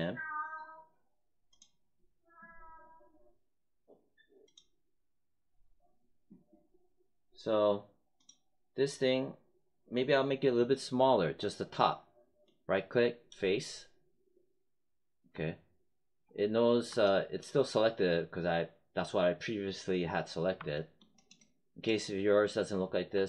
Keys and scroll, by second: 15.3 space.